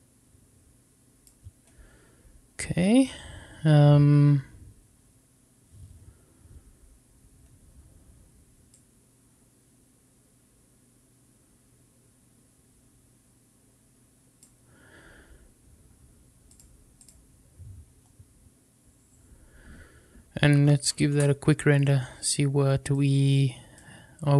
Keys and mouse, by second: 8.6-14.4 drag, 16.5 click, 21.5 F12.